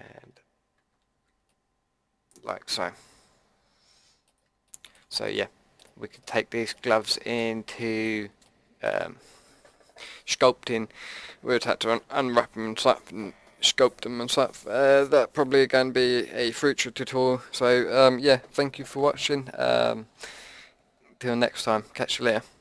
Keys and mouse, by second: 0.0 Tab, 0.7 Tab, 1.1 a, 1.5-3.5 drag.